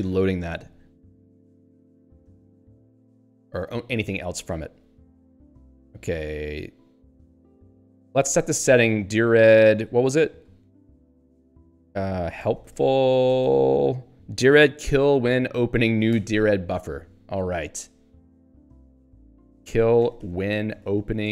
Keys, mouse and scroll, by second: 3.4 Up, 4.0 Left, 4.9 Down, 7.0 Up, 7.4 Right, 8.1 End, 8.4 Return, 8.7-10.3 typing, 10.8 click, 11.8-13.3 typing, 16.1 ctrl+g, 19.0 click, 19.1-21.3 typing.